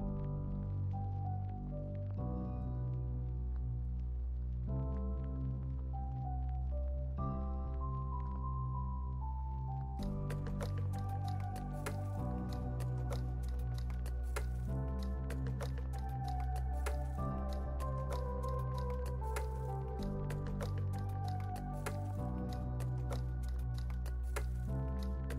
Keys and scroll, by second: 3.1 Delete, 4.9 super+s, 7.3 space, 9.5 space, 15.8 x, 16.5 Delete, 17.7 super+s, 20.0 space.